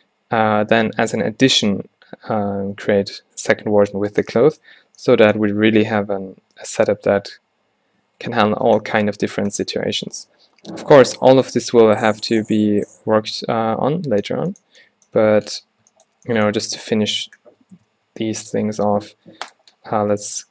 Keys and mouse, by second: 8.5 middle click, 18.0 shift+a, 19.6 drag.